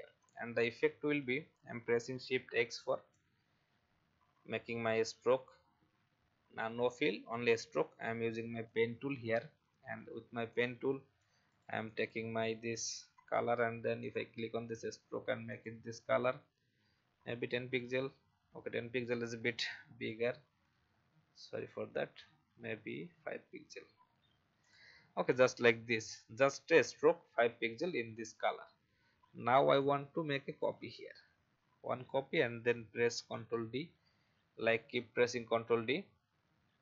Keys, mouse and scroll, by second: 0.2 click, 0.7 alt+scroll up 1, 2.4 shift+x, 8.6 click, 10.5 shift+click, 11.2 shift+v, 11.5 click, 17.3-19.4 shift+scroll up 1, 19.4-20.8 scroll down 1, 22.1-23.3 scroll down 1, 24.6 click, 28.6 alt+scroll up 1, 29.7 alt+click, 31.8-32.4 alt+scroll down 1, 33.2 ctrl+d, 33.3-34.8 typing.